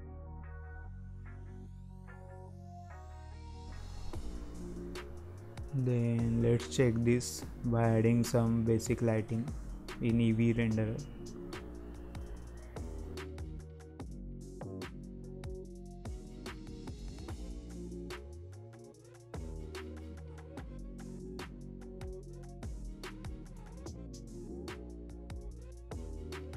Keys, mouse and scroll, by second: 0.5-1.5 drag, 1.5 z, 2.5-2.8 scroll up 1, 2.8 middle click, 3.1-3.4 scroll down 2, 3.5 alt+a, 4.1 click, 5.8 g, 7.4-7.7 scroll up 2, 7.7-8.3 middle drag, 8.3-8.6 scroll down 1, 8.6 middle click, 9.0-9.7 scroll down 1, 9.7 click, 11.1-12.0 middle drag, 12.0 click, 12.8 scroll up 2, 13.1-13.7 middle drag, 13.7-14.0 scroll down 1, 14.0-15.1 shift+middle drag, 15.1 click, 15.8-16.1 scroll up 3, 16.1-16.5 shift+middle drag, 16.5 scroll down 1, 16.8-18.1 shift+middle drag, 18.1-19.7 right drag.